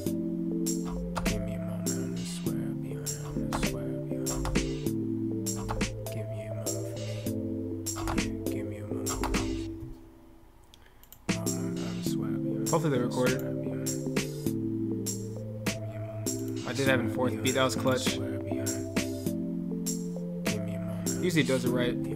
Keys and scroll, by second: 21.2 ctrl+F8.